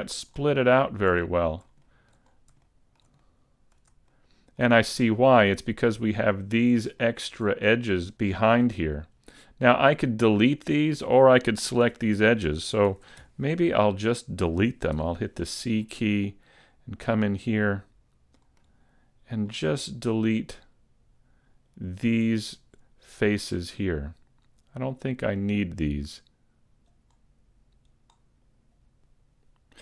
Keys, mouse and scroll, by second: 0.6 shift+middle click, 1.2 middle click, 1.7 shift+scroll up 1, 1.8 shift+middle click, 2.2-2.6 scroll up 3, 2.6 shift+middle click, 3.2 middle click, 4.1 shift+middle click, 7.0 shift+middle click, 7.6-8.1 scroll up 1, 8.1-8.6 scroll down 5, 9.1-9.7 scroll up 2, 9.8 scroll down 1, 11.8 a, 12.9 ctrl+Tab, 15.0 c.